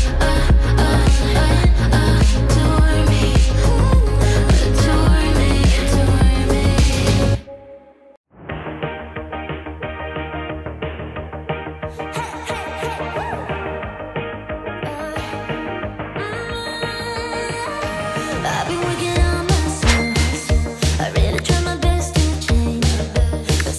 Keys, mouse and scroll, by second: 1.0-1.8 typing, 3.2-4.0 typing, 4.3 Return, 6.1 click, 6.4 space, 8.6 space, 10.2 click, 10.6 ctrl+space, 11.2-12.7 typing, 13.9 space, 15.8 click, 19.0 space.